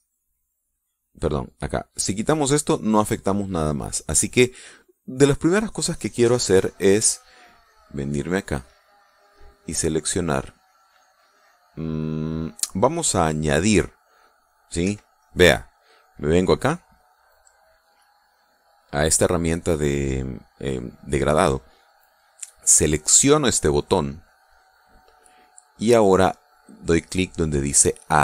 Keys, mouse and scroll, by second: 1.2 click, 1.9 click, 2.5 click, 2.8 click, 3.2 click, 3.6 click, 4.0 click, 5.0 middle click, 5.3-7.3 drag, 9.1 click, 10.3 click, 15.3 Escape, 19.3 click, 23.7 click, 24.7-25.5 drag.